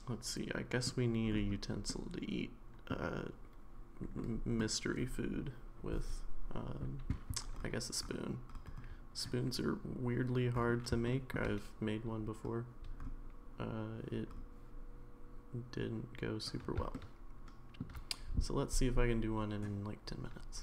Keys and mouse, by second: 1.9-2.9 middle drag, 4.2-4.6 middle drag, 11.0-11.3 shift+middle drag, 16.9-17.8 shift+middle drag.